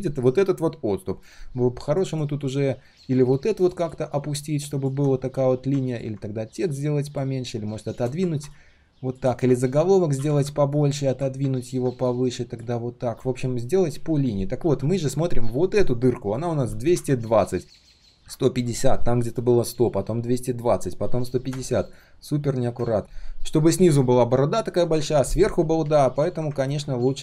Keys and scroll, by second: 10.1 ctrl+z, 16.9 ctrl+z.